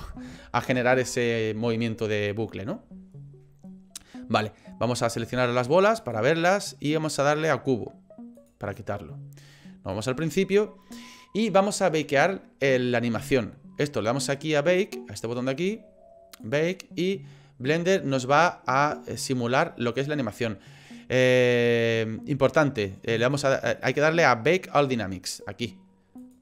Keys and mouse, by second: 6.0 click, 8.4 click, 10.0 click, 16.4-20.2 drag, 23.3 click, 25.3-26.3 drag.